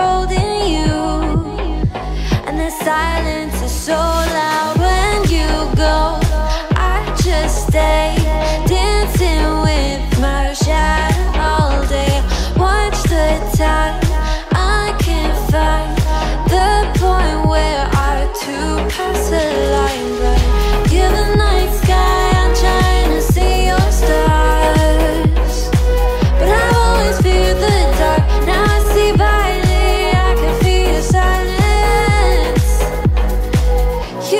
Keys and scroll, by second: 0.8 Left, 2.2 Left, 3.8 Right, 4.6 Left, 6.2 Right.